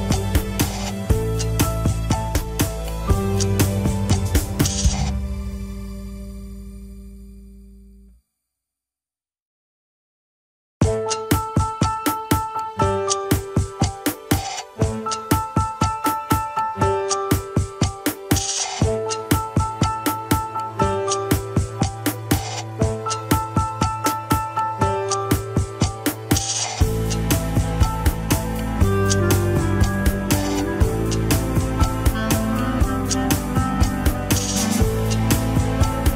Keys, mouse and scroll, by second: 3.6 ctrl+s, 3.7 scroll up 2, 4.1 click, 4.7 g, 5.9 click, 6.6 g, 7.5 click, 8.3 g, 9.1 scroll down 2, 9.4-10.8 middle drag, 10.8 KP_3, 11.1 scroll up 3, 11.6-13.8 middle drag, 13.8 KP_1, 14.4 ctrl+Tab, 14.6 shift+click, 14.9 ctrl+Tab, 16.2 ctrl+click, 16.6-17.9 middle drag, 17.9 ctrl+click, 18.1 alt+z, 19.2 ctrl+click, 19.5 alt+z, 19.8-20.8 middle drag, 20.8-21.3 scroll down 3, 21.0 KP_1, 21.3 ctrl+Tab, 22.1 ctrl+s, 22.2 click, 22.8 drag, 23.1-23.6 scroll up 2, 23.4 shift+middle click, 24.3 ctrl+Tab, 24.7 click, 25.5 scroll up 2, 26.6 click, 29.6 scroll up 3, 30.1 click, 33.5 click, 34.0 g, 35.5 scroll down 2, 35.7-36.1 middle drag.